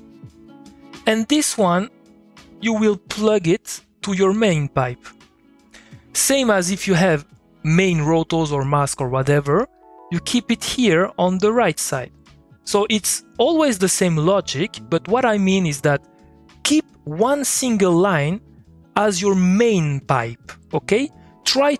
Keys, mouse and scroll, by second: 9.8 click.